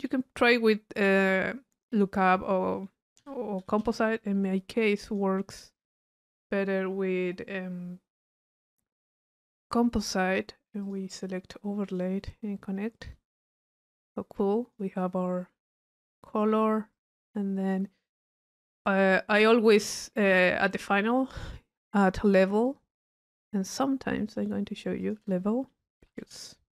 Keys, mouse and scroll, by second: 1.3 right click, 2.2 click, 3.4 c, 5.1 click, 10.8 click, 11.9 click, 13.0-13.5 drag, 14.4-14.8 drag, 16.1 click, 22.7-23.7 drag, 24.3 right click, 25.0 click.